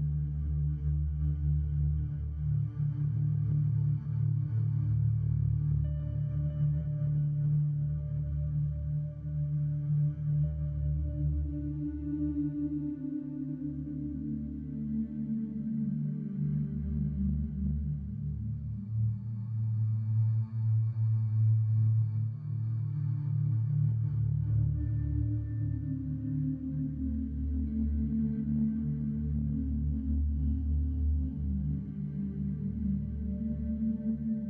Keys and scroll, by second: 0.2 alt+s, 2.2 3, 3.2 ctrl+b, 5.4-9.6 typing, 10.2 ctrl+x, 10.4 ctrl+x, 10.7 ctrl+x, 10.9 1, 11.1 2, 11.4 ctrl+x, 11.9 ctrl+x, 12.4 h, 12.8 ctrl+z, 12.9 j, 14.0 j, 14.6 Tab, 14.9 Tab, 15.1 a, 16.1 1, 17.1 1, 18.2 space, 18.7 Escape, 19.3 space, 20.0 space, 22.3 space, 23.0 space, 23.2 Tab, 24.4 c, 24.7 2, 25.5 ctrl+x, 25.7-27.7 typing, 25.9 ctrl+r, 29.4 1, 30.7 c, 30.8 space, 31.9 c, 32.1 space, 33.2 c, 33.4 space, 33.7 c, 33.8 2.